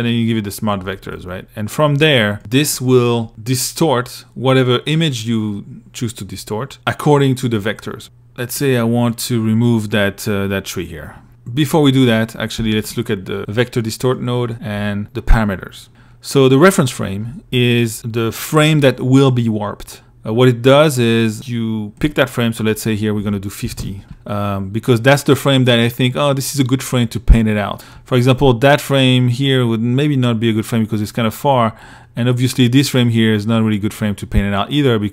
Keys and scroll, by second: 22.6-23.4 typing.